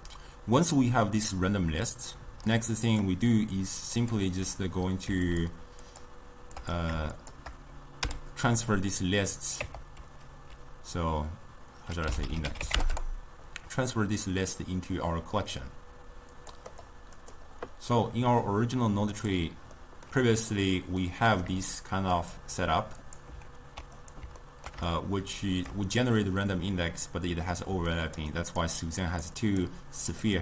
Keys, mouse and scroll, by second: 2.5-5.5 drag, 5.9 shift+click, 6.6 click, 7.2 shift+click, 8.1 m, 13.0 Return, 16.4-17.4 drag, 18.0-19.2 middle drag, 19.2 click, 19.8-22.2 middle drag, 22.2-24.2 drag, 24.5-27.8 ctrl+middle drag, 27.8-30.4 typing, 28.0 click, 28.4 click, 29.1 click.